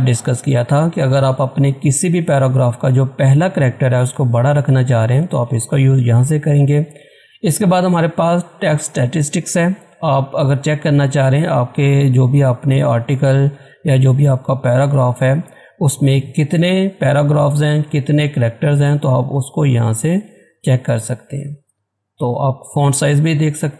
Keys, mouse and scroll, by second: 9.6 click.